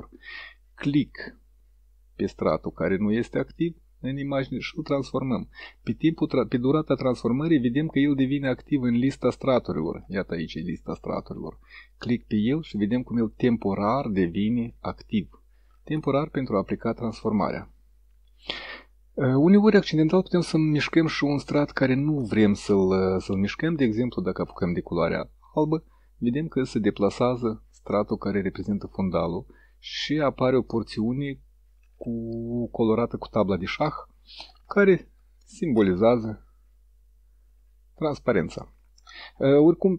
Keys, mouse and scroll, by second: 0.6-9.7 drag, 12.0 click, 13.4-17.9 drag, 22.7 middle click, 24.9-29.7 drag.